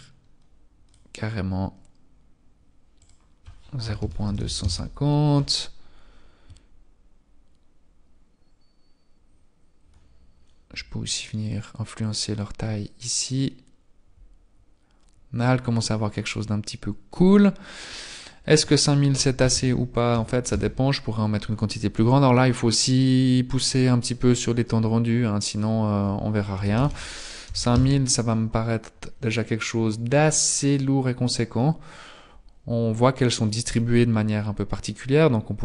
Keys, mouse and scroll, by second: 4.8 click, 11.7-12.2 scroll down 3, 12.2 click, 20.7 click, 20.7 KP_0, 28.0 click, 28.0 KP_0.